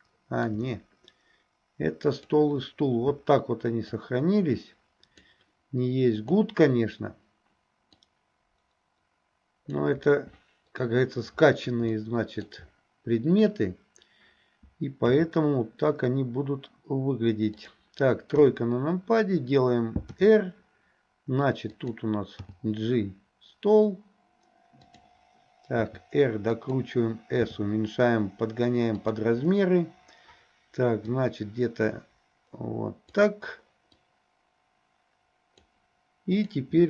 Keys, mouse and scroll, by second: 2.1 click, 4.1-5.3 drag, 6.2 click, 8.0-9.7 drag, 11.9-12.5 shift+middle drag, 15.1 s, 18.4 KP_3, 20.2 r, 22.4 g, 25.8 r, 27.4 s, 31.1-33.2 drag, 34.2-35.7 drag, 36.4 click.